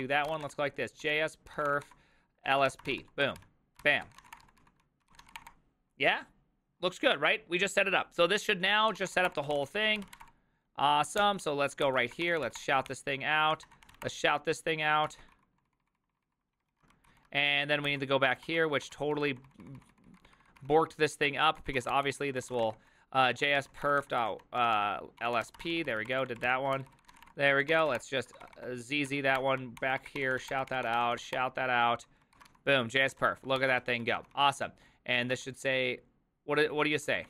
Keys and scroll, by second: 0.0-5.7 typing, 9.0-10.5 typing, 11.2 ctrl+h, 11.8 ctrl+n, 12.0-17.2 typing, 17.9 ctrl+n, 18.3-28.9 typing, 18.4 ctrl+d, 18.8 ctrl+d, 29.1 Up, 29.4 Return, 29.8 ctrl+n, 29.9-37.2 typing, 32.4 ctrl+w.